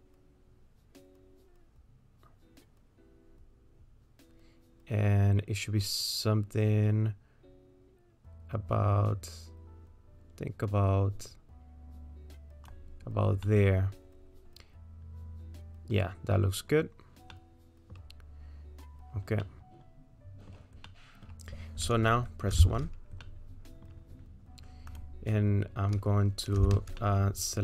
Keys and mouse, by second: 13.4-16.3 middle drag, 17.3 middle click, 19.5-20.5 middle drag, 21.0 middle click, 22.6 1, 23.2 click, 23.7 click, 26.6 w, 27.1 middle click.